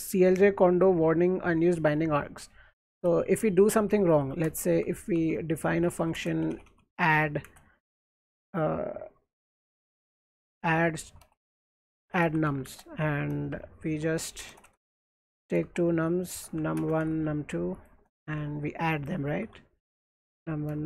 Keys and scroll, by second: 3.0-8.1 typing, 9.4-20.8 typing.